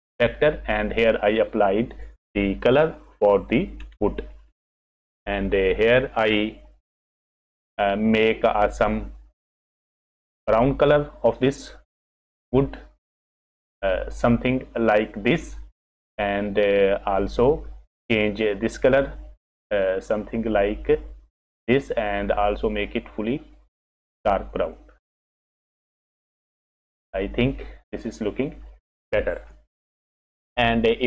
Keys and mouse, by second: 7.0 click, 30.2 F6.